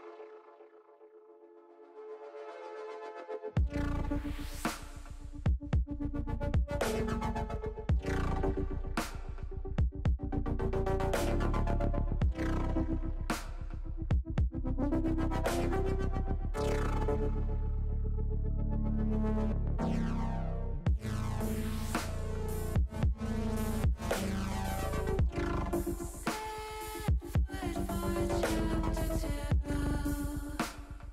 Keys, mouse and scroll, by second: 15.4 shift+middle click, 16.1-17.7 middle drag, 18.9 middle click, 20.1 KP_1, 27.5 click, 28.2 middle click, 30.4 click.